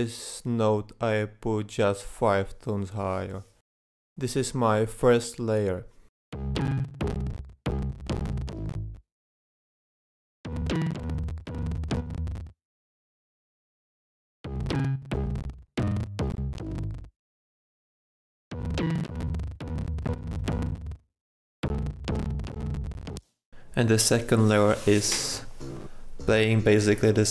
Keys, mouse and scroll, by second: 23.7 click, 24.8-26.9 drag.